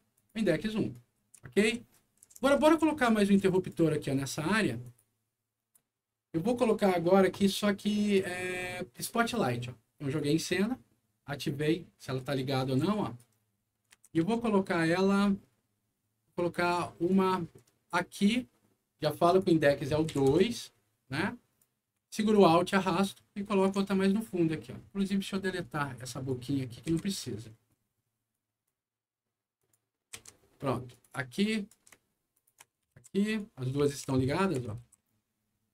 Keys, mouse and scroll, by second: 0.1 click, 0.9-3.6 right drag, 1.0-2.9 typing, 4.8 click, 6.7 click, 9.3 click, 11.4 click, 12.1-13.1 right drag, 12.6 d, 13.7 middle click, 13.9 alt+w, 14.2 z, 15.1-15.6 scroll up 2, 17.0-18.3 drag, 19.2 click, 20.1 2, 20.3 Return, 21.1 right click, 22.3-23.6 alt+drag, 24.8-25.6 alt+scroll up 3, 26.1 alt+click, 26.8 Delete, 27.1-28.1 scroll down 3, 28.1 scroll up 1, 28.3 right click, 28.8-29.3 scroll up 1, 29.5 click, 30.1 Delete, 30.4 scroll down 1, 30.9 click, 31.3 right click, 32.3 ctrl+click, 32.9 alt+w, 33.3-35.0 alt+right drag, 33.5-35.3 typing.